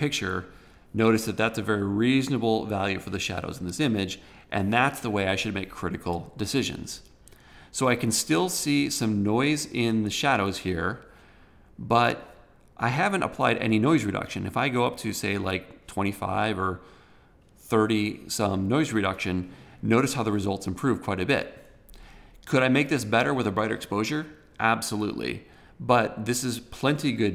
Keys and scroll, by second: 3.3 super+=.